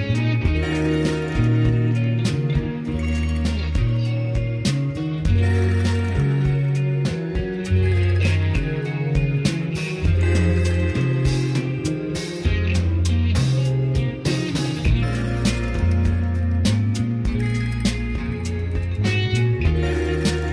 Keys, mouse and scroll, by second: 2.0 click, 11.0 middle click.